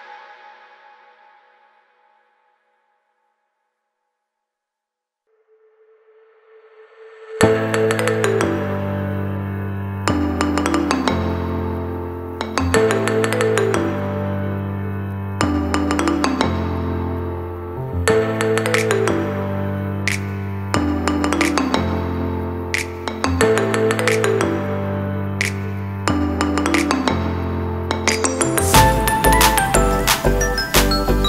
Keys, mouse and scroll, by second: 0.5 middle click, 2.5 shift+middle click, 3.0 ctrl+middle click, 4.1 click, 6.3 middle click, 7.5 ctrl+middle click, 8.0 shift+middle click, 8.3 middle click, 8.6 click, 8.8 right click, 10.4 middle click, 12.9 Page_Up, 15.2 click, 15.5 middle click, 16.0 click, 16.9 click, 18.9-19.6 click, 19.0 click, 19.1 click, 20.2 click, 20.4 click, 20.6 click, 20.8 click, 21.6 middle click, 25.1-26.0 scroll down 4, 25.3 middle click, 25.9 click, 26.3 click, 26.8 g, 27.2 shift+middle click, 27.4 shift+a.